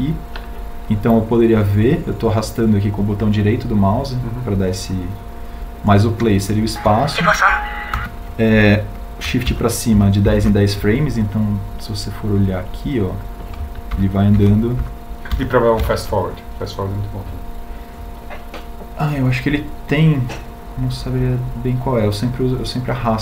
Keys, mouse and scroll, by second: 15.0 shift+Up.